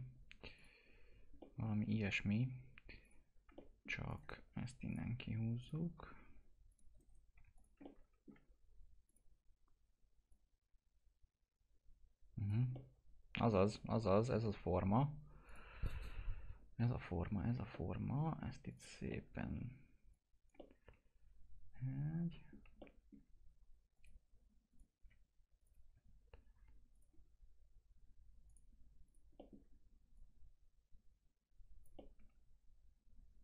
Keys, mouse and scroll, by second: 0.5 click, 1.3 click, 2.0 middle click, 2.0-3.0 scroll up 1, 3.0 click, 3.6 alt+middle click, 4.0 click, 4.2 right click, 4.8 click, 6.9 right click, 7.3 2, 7.5 click, 7.8 alt+middle click, 9.0-12.7 drag, 12.7-15.4 alt+middle drag, 15.4 click, 17.7 alt+middle click, 18.6 click, 19.3 alt+middle click, 20.1 click, 20.5-22.7 alt+middle drag, 23.9 click, 26.9 click, 29.3 alt+middle click, 30.1-31.9 drag, 31.9 alt+middle click.